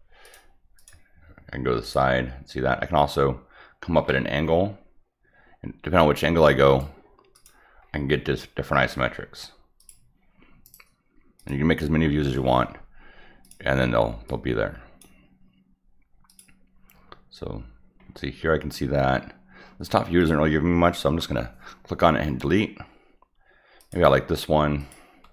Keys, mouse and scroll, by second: 0.2 click, 0.7 click, 1.8 click, 4.0 middle click, 6.2 click, 7.3 click, 7.8-8.2 scroll up 2, 9.8 click, 10.6 right click, 11.4 click, 13.4 click, 14.2-15.0 drag, 16.2 click, 18.1 middle click, 19.1 middle click, 20.2 click, 23.8 click, 24.8 click.